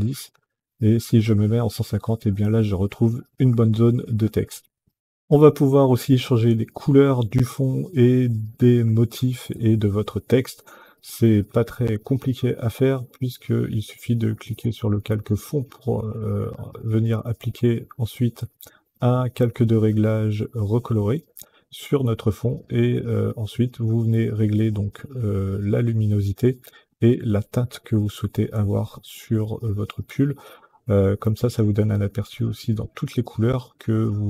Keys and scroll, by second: 3.5 Down.